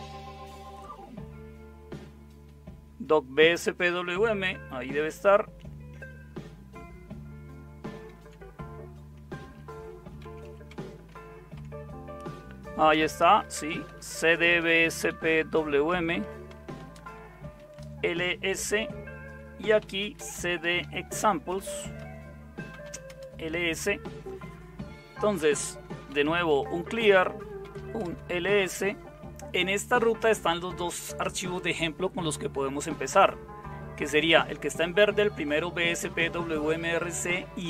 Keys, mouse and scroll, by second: 7.8 super+0, 10.2 typing, 10.7 Tab, 11.1 Tab, 11.5 Tab, 12.9-16.1 typing, 17.5 Return, 17.8-18.6 typing, 19.8-23.6 typing, 25.9-28.1 typing.